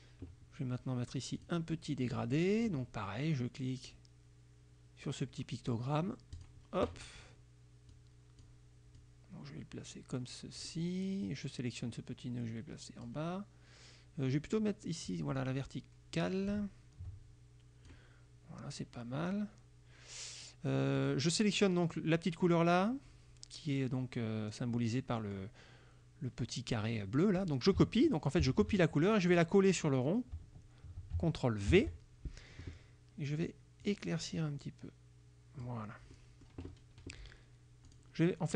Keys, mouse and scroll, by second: 1.4 click, 6.4 click, 8.0 click, 9.0-10.9 drag, 11.9-13.3 drag, 14.5-18.2 drag, 21.0 click, 25.3 click, 28.5 ctrl+c, 29.4 click, 31.7 ctrl+v, 33.9-35.9 drag, 36.2 click, 38.0 click.